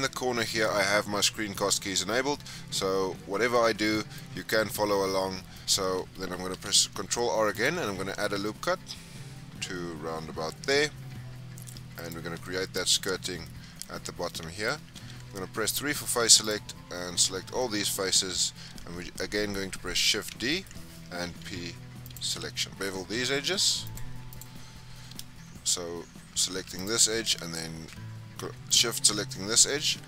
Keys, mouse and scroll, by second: 3.9-5.7 middle drag, 5.5 scroll up 2, 6.4 ctrl+r, 12.3 shift+scroll down 1, 12.3-13.3 shift+middle drag, 13.3 scroll down 1, 13.5-14.9 middle drag, 14.9 3, 16.3 alt+click, 17.5-20.0 middle drag, 20.0 shift+d, 21.2 p, 22.6 Tab, 23.0 2, 23.8 click, 24.2 alt+click, 26.7 click, 28.6 shift+click.